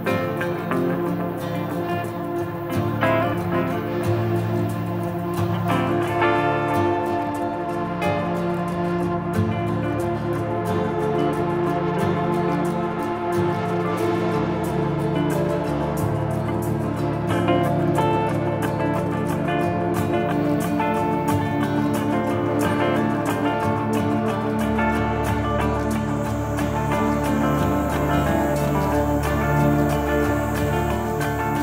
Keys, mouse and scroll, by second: 0.6 a, 0.8 e, 0.9 Return, 1.2 middle click, 1.4 shift+middle click, 2.0 click, 5.4 middle click, 5.8 click, 8.9 KP_2, 9.1 Return, 10.6 KP_0, 10.8 KP_5, 11.1-11.5 scroll up 1, 11.5 middle click, 16.1 click, 19.8 middle click, 20.4 middle click, 20.9 ctrl+middle click, 21.1 middle click, 22.8 middle click, 23.8 scroll up 1, 24.2 ctrl+middle click, 27.7 middle click, 27.8 click, 28.8 click, 29.8 shift+c, 29.9 o, 30.4 Return, 31.4 Return.